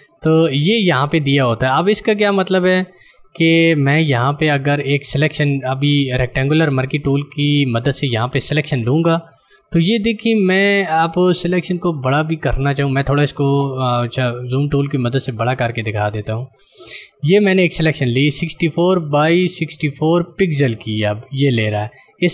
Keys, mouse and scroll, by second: 8.7 click.